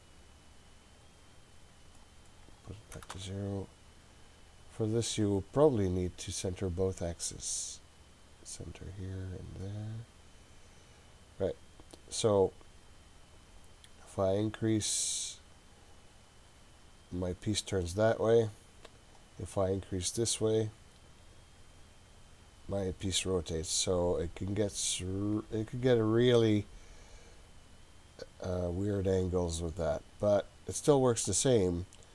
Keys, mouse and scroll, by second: 2.0-3.6 drag, 4.1-5.6 scroll up 4, 5.6-6.1 scroll up 3, 8.8 click, 9.7 click, 11.0-13.4 scroll down 4, 13.4-19.2 drag, 20.9-23.1 drag, 24.4-27.2 drag, 28.9-30.4 drag, 31.8-32.1 drag.